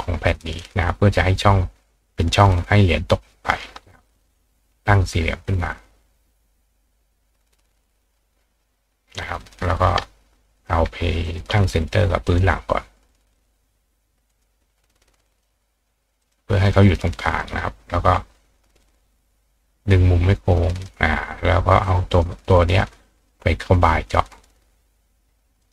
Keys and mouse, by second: 0.6 click, 4.2 click, 5.4-7.7 drag, 9.4 click, 10.6 click, 11.2 shift+click, 12.3 click, 13.4 click, 14.3 click, 15.3 click, 16.2 click, 16.7 click, 17.3 click, 18.8 click, 19.9 click, 22.1 click, 23.2 shift+click, 25.6 click.